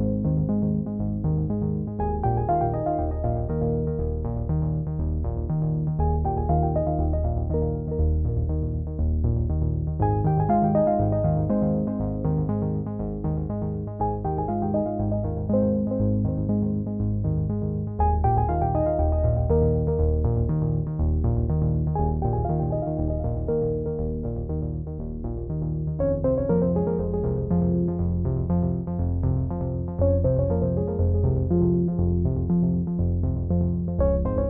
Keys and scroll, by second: 1.6 ctrl+t, 30.7 ctrl+i.